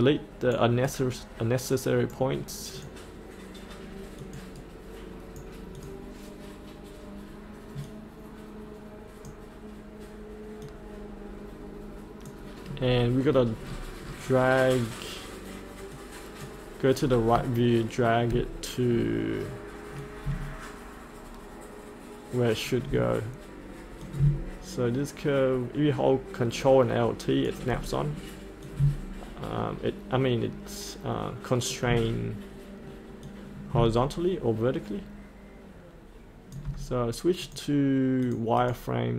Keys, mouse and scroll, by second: 2.7 click, 4.5 right click, 5.8-12.8 drag, 12.8-13.6 scroll up 1, 15.9 click, 17.0 scroll up 1, 17.6 shift+middle click, 18.4-18.8 scroll down 1, 20.0 click, 32.6-36.8 drag.